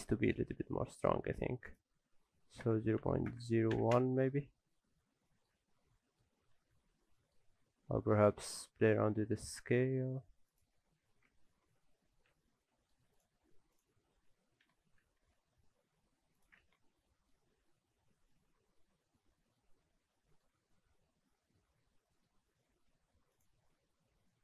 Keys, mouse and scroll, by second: 0.0-0.5 scroll up 1, 0.6-0.9 scroll up 1, 0.9 middle click, 1.7 click, 4.8-5.3 scroll down 2, 5.0 middle click, 5.7 scroll down 1, 6.0 shift+middle click, 6.6 Tab, 6.9 a, 7.1 middle click, 7.6 a, 7.9 s, 11.4 alt+a, 11.7 Tab, 11.9 scroll down 2, 12.1 alt+a, 12.3 middle click, 13.1 click, 13.4-14.0 scroll up 4, 13.7 click, 14.5 scroll up 2, 14.7 Tab, 15.0 a, 15.2 s, 16.6 alt+a, 16.7 Tab, 16.9 scroll down 1, 17.0 middle click, 17.4 alt+a, 17.5 scroll down 2, 17.7 middle click, 21.1-22.3 scroll down 8, 21.6 middle click, 22.3-22.7 scroll up 2, 23.3 click, 23.3 scroll up 7.